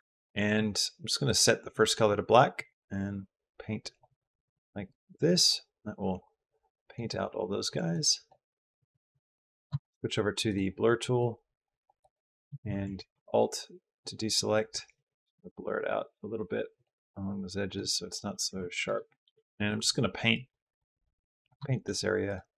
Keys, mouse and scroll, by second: 2.4 click, 3.9 click, 6.9 click, 7.8 click, 9.6 shift+click, 9.6 shift+middle click, 11.0 middle click, 12.7 alt+a, 14.7 alt+a, 14.7 alt+s, 16.9 click, 17.7 middle click, 18.4 ctrl+z, 19.2 middle click, 19.4 middle click, 20.1 middle click, 20.4 click, 20.7 click, 21.2 click, 21.5 shift+middle click, 22.0 click, 22.4 click.